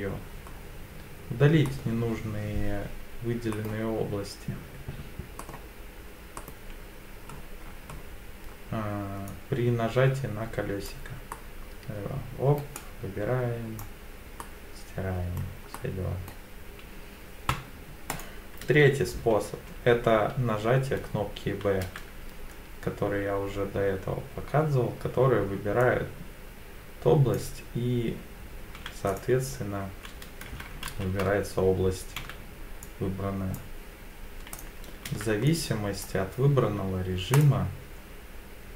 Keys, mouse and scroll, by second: 0.5-1.2 scroll down 2, 1.7 middle click, 3.5 middle click, 5.4 middle click, 6.4 middle click, 7.2-7.6 scroll up 2, 7.6 scroll down 1, 7.7 scroll down 1, 8.5-9.2 scroll down 2, 9.3 click, 11.3 middle click, 12.8 click, 14.4 middle click, 15.1 scroll up 1, 15.8 middle click, 18.1 right click, 21.8 b, 29.1 click, 30.9 ctrl+z, 32.2 b, 34.5 click, 35.0 b, 37.3 click.